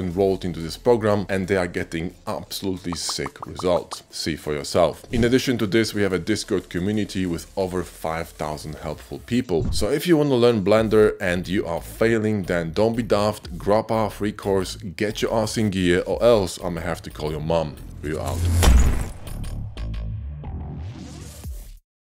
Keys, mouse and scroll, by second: 0.2 g, 0.9 Tab, 2.1 ctrl+KP_Add, 2.8 p, 2.8 shift+click.